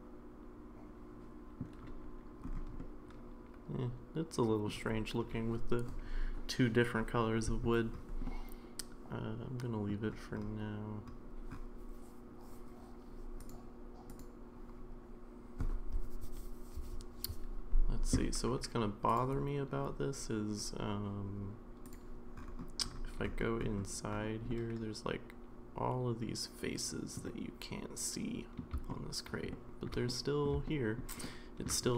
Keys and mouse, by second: 2.8-4.7 middle drag, 8.3-9.9 middle drag, 14.1 click, 19.1 click, 21.9 click, 24.5-27.1 middle drag, 27.3-28.6 middle drag, 29.0-29.4 shift+middle drag, 29.5 shift+middle drag, 30.0-30.4 middle drag, 30.6-31.0 shift+middle drag, 31.2-31.7 shift+middle drag, 31.8-31.9 middle drag.